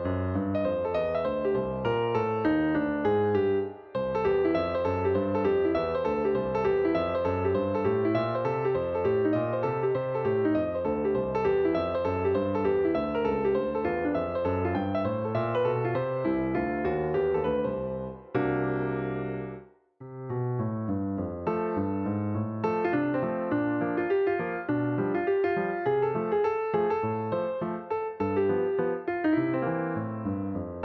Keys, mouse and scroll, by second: 8.7 click, 13.3-25.6 drag.